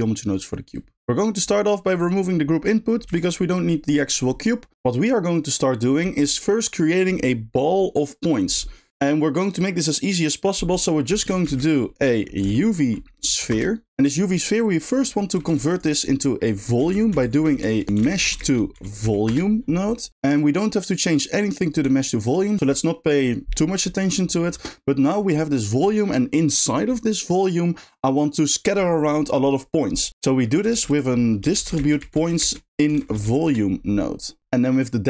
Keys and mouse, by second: 0.0 click, 1.3 middle click, 1.9 click, 3.0 x, 15.0 click, 20.3 click, 21.6 click, 21.9 g, 22.5 click, 30.7 shift+a.